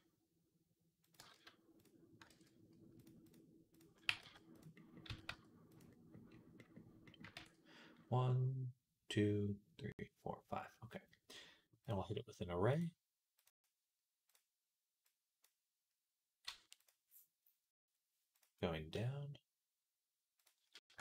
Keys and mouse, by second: 1.0 g, 2.0 ctrl+middle click, 2.1 ctrl+z, 2.8-4.5 drag, 3.9 g, 4.5-5.9 middle drag, 4.9 s, 5.9-21.0 drag, 7.2 s.